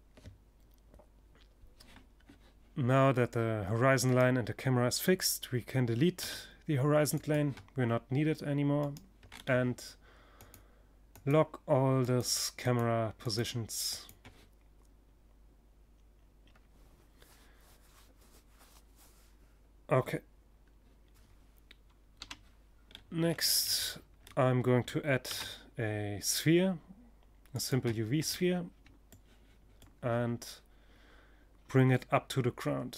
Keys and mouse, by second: 2.5-4.0 right drag, 4.0 click, 4.1 right click, 4.6 x, 7.2 click, 7.3 right click, 7.8 click, 7.9 right click, 8.0 click, 8.8 middle click, 9.2-14.1 drag, 20.6 KP_3, 21.3-24.1 middle drag, 23.7 shift+a, 24.3 click, 26.9 click, 31.6 Tab.